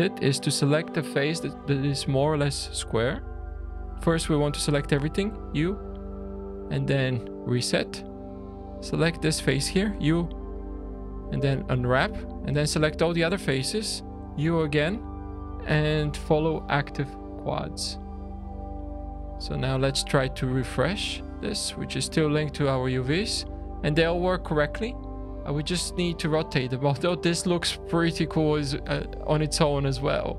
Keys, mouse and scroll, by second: 4.2 a, 5.3 u, 8.0 click, 9.9 u, 12.7 a, 14.1 u, 18.1-18.7 scroll down 3, 18.7 Tab, 19.0 click, 21.1 click, 22.7-23.2 scroll up 4, 23.2-23.6 scroll down 2, 23.6 middle click, 24.3 shift+middle click, 27.9-28.7 scroll up 5, 28.7 scroll down 2, 29.1 shift+middle click.